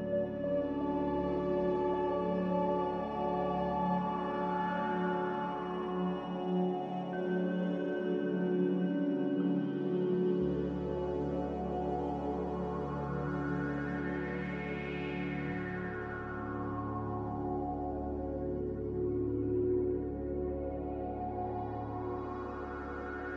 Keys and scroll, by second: 1.5-4.2 typing, 6.3 z, 6.5 a, 18.8 x, 20.6 n.